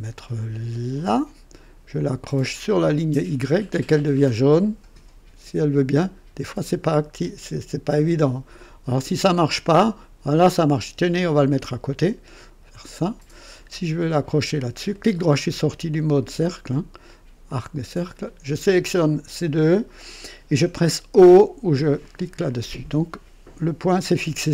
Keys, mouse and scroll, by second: 0.9 click, 11.4 click, 12.8 click, 13.4 right click, 14.9 right click, 15.9 click, 17.4 click, 18.9 click, 22.0 click.